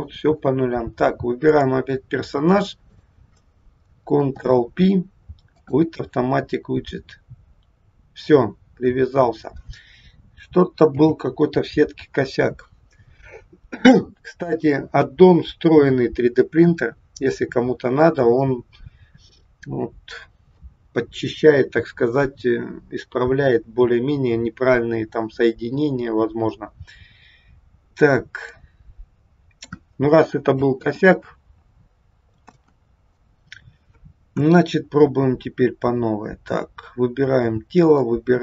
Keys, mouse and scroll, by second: 1.4 click, 2.8 shift+click, 4.3 ctrl+p, 10.9 n, 26.3 scroll up 2, 27.0-28.1 scroll down 3, 28.4 middle click, 30.7 ctrl+z, 32.5 ctrl+z, 34.3 KP_1, 36.0-36.4 scroll up 2, 36.9 scroll down 1, 37.7 shift+click.